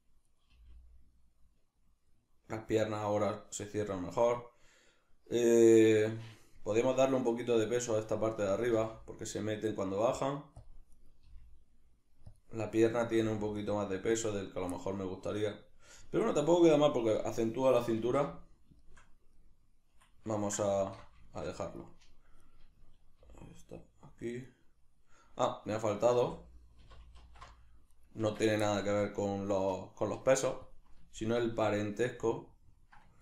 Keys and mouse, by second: 0.3 right click, 0.5 g, 6.1 right click, 8.4 g, 10.7 click, 11.0 right click, 11.2 g, 12.4 click, 12.8 right click, 13.2 g, 14.2 click, 14.8-18.8 middle drag, 18.0 alt+q, 20.8 alt+q, 21.3 shift+middle click, 22.4 right click, 23.2 g, 24.6 right click, 26.2 a, 28.0 right click, 28.2 Tab, 28.7-30.7 shift+middle drag, 30.7 click, 31.2-33.2 ctrl+middle drag.